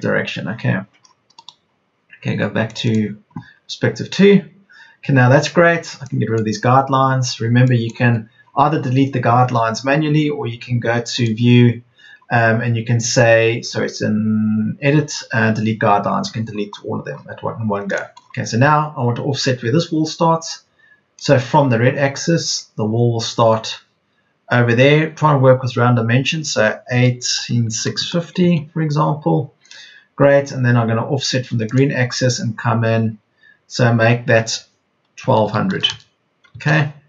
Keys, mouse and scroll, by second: 6.7 Delete, 16.2 Escape, 17.4 Escape, 26.8 KP_1, 27.3 KP_8, 27.7 KP_6, 27.9 KP_0, 35.1 KP_1, 35.3 KP_2, 35.7 KP_0.